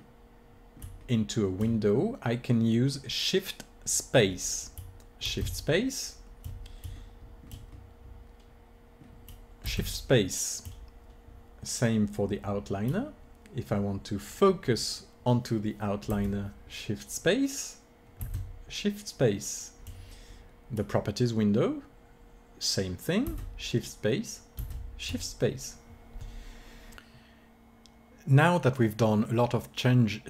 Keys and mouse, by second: 5.2 shift+space, 7.0-9.6 middle drag, 9.6 shift+space, 18.2 shift+space, 24.7 shift+space.